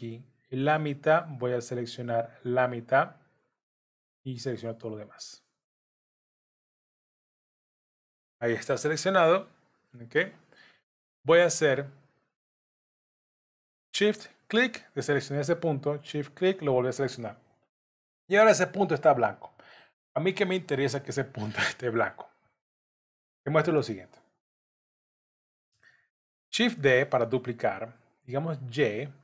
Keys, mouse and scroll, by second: 5.6 click, 14.3 shift+click, 25.8 shift+d.